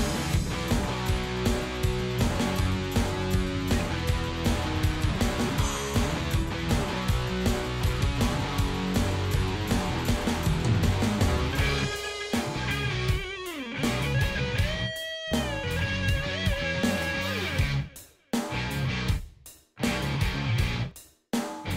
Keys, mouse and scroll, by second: 0.8 click, 2.4 click, 8.6-12.8 drag, 14.3 click, 14.8 click, 15.8 click, 16.6 ctrl+d, 17.0-19.5 ctrl+drag, 21.1-21.7 drag.